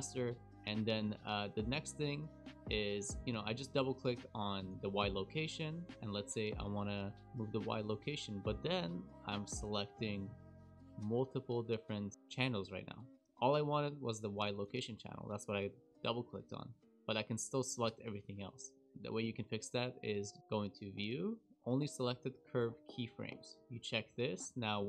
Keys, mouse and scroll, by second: 1.2 click, 1.4 click, 1.7 KP_Decimal, 2.2-3.2 scroll down 14, 3.3 shift+middle click, 4.6 click, 4.7 click, 5.6 click, 7.1 click, 7.9 g, 14.3 click, 14.5 click, 14.7 click, 16.0 click, 17.1 click, 17.8 g, 24.1 click.